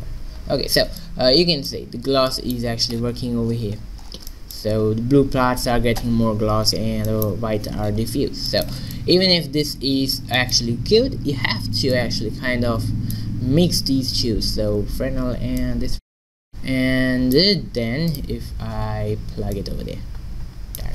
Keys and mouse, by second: 0.0 middle click, 0.3 middle click, 4.0 middle click, 6.3 middle click, 12.0-13.6 drag, 15.7 click, 16.5-18.2 middle drag, 18.2-20.9 drag.